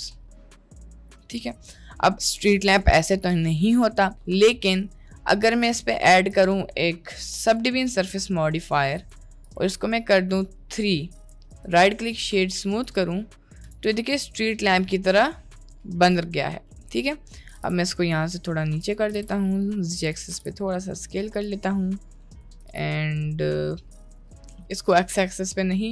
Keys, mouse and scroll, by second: 1.2 Tab, 1.4-2.1 middle drag, 4.6 middle click, 5.7-7.6 drag, 9.0 click, 11.1 middle drag, 11.5 right click, 12.9 drag, 13.1-13.5 middle drag, 14.1-14.7 middle drag, 15.1-15.5 middle drag, 15.9 click, 16.9 middle click, 17.5 g, 19.1 s, 20.3 g, 21.6-22.1 middle drag, 22.3 middle click, 22.6 s, 24.4 middle click, 24.6 ctrl+z, 24.8-25.9 middle drag.